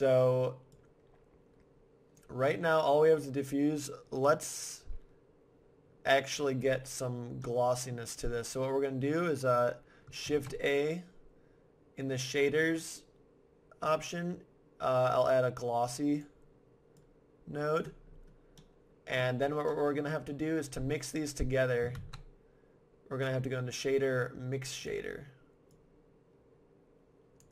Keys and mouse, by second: 0.7-2.5 drag, 2.9-4.7 drag, 7.4-9.2 middle drag, 10.2 shift+a, 17.0-18.6 drag, 18.6-21.4 middle drag, 21.9 shift+a, 25.7-27.3 drag, 27.4 click.